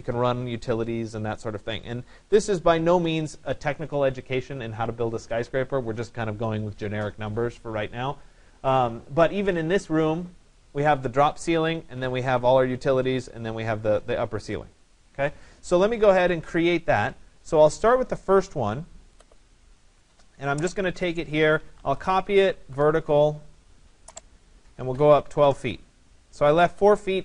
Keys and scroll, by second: 21.7 Return, 24.9 2, 25.4 Return.